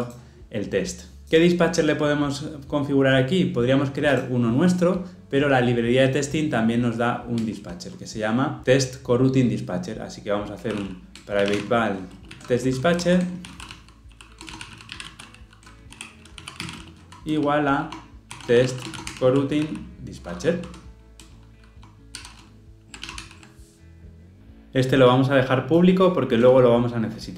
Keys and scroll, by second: 11.2 Return, 21.2 Return, 23.1 ctrl+alt+o.